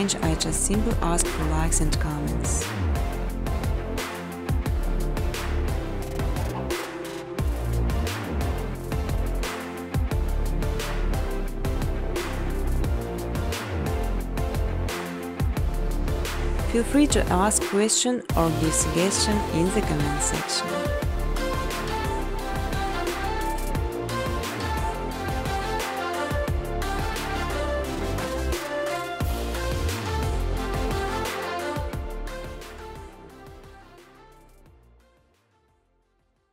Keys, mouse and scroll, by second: 0.0-1.9 typing, 3.5 click, 3.7 click, 6.5 click, 6.8-9.0 typing, 8.2 click, 34.1-36.5 typing.